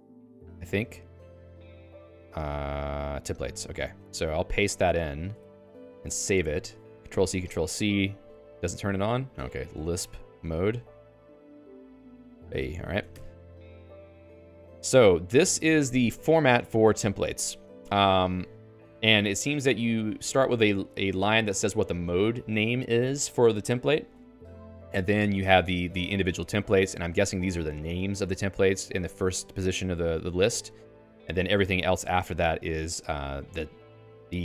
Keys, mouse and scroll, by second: 3.4 Return, 4.3 p, 5.5 ctrl+s, 8.3-11.0 typing, 11.9 Return, 12.5 Escape, 12.9 ctrl+s, 13.1 Escape, 13.1-15.7 typing, 18.7 k, 18.9 k, 19.7 h, 20.2 shift+v, 24.1 Escape, 24.4-34.4 typing, 25.9 Escape.